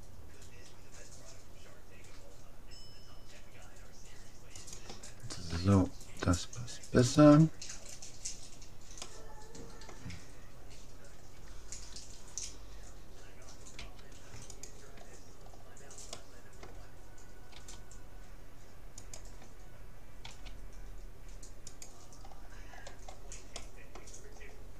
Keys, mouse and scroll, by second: 5.5 a, 7.1-8.7 right drag, 7.9-10.7 middle drag, 13.8 u, 15.5 middle click, 16.1-17.6 middle drag, 17.6 g, 20.3 s, 22.3-24.7 middle drag.